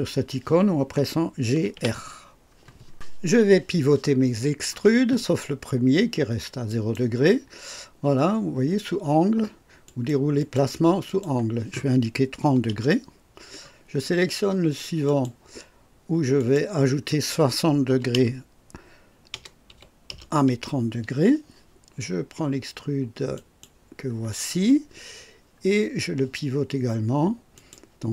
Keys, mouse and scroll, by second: 1.1-2.2 typing, 6.6 click, 9.8 click, 10.3 click, 11.0 click, 12.4 KP_3, 12.7 KP_0, 15.0 click, 16.3 click, 17.8 KP_3, 18.1 KP_0, 19.3 KP_Add, 19.7 KP_6, 20.1 KP_0, 23.3 click, 27.5 click.